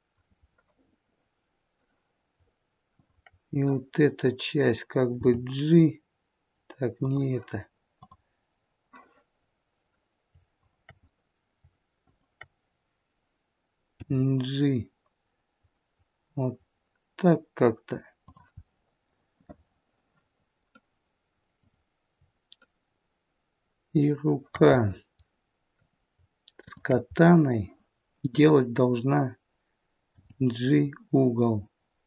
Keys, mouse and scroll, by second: 2.8 shift+click, 5.0 g, 7.8 click, 10.6 shift+click, 11.1 middle click, 12.0 shift+click, 14.0 g, 18.6 middle click, 21.6 click, 24.8 middle click, 25.7 click, 26.6 shift+click, 27.2 middle click, 30.1 g.